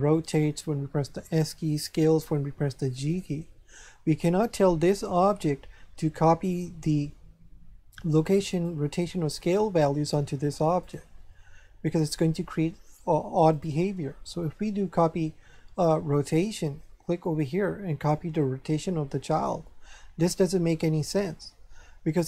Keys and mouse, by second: 0.1 right click, 0.9 s, 1.7 right click, 2.2 g, 3.1 right click, 8.5 right click, 10.8 right click, 13.5 click, 16.1 click, 17.2 click, 19.3 click.